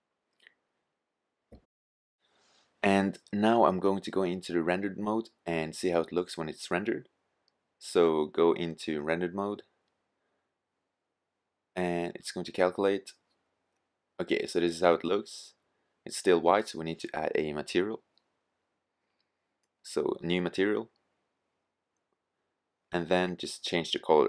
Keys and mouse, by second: 1.7 click, 6.5 click, 8.5 drag, 22.2-22.8 middle drag.